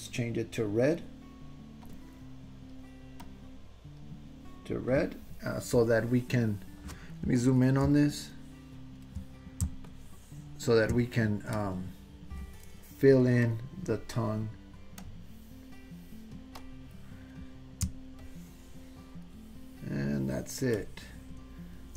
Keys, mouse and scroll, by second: 8.1 ctrl+middle click, 9.9 shift+middle click, 11.6 click, 13.5 click, 15.0 click, 16.6 click, 18.1-19.3 shift+drag, 20.7 shift+middle click.